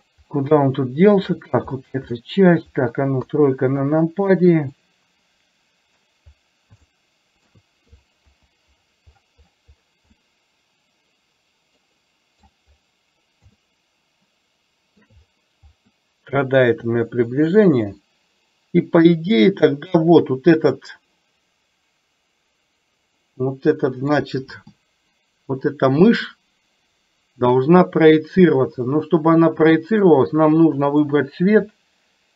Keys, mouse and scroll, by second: 0.6-1.2 shift+middle drag, 3.3 KP_3, 4.8-6.1 middle drag, 6.9-7.6 shift+middle drag, 8.3 KP_7, 10.3-11.9 middle drag, 12.1 middle click, 13.7-15.2 shift+middle drag, 16.9-17.6 shift+middle drag, 19.4 click, 23.3-24.3 middle drag, 29.1-30.2 middle drag, 30.9 click.